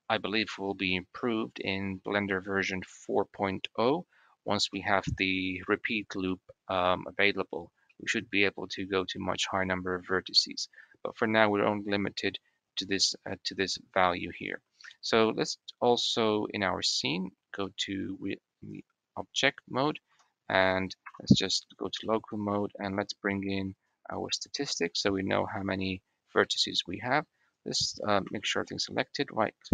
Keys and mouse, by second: 0.1 click, 4.7 click, 6.3 middle click, 7.8 middle click, 14.0 middle click, 15.1 click, 16.8 click, 17.5 click, 19.9 Tab, 21.9 click, 23.7-25.7 drag, 26.3 click, 27.3 click, 28.1 a, 28.9-29.7 drag.